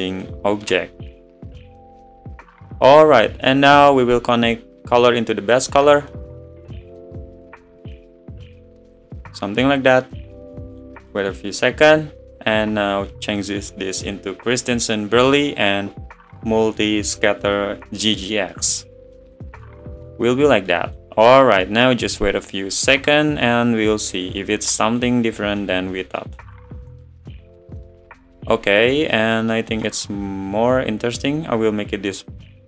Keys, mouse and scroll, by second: 2.0 click, 7.8-9.6 drag, 11.9-14.5 middle drag, 14.5-17.6 drag, 19.2-20.5 drag, 20.5-24.4 middle drag, 24.4 scroll down 5, 24.8 middle click, 29.0 scroll up 4, 32.4-32.6 drag.